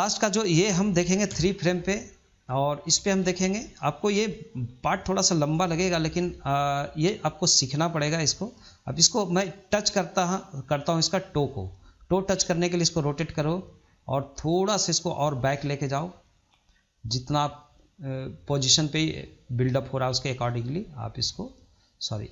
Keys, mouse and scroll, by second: 1.1 KP_3, 2.3-3.2 shift+middle drag, 3.2 scroll up 2, 3.5-7.0 shift+middle drag, 7.0 click, 8.7 click, 11.9 click, 14.8 click, 16.2-17.6 drag, 20.2 click, 22.0 ctrl+z.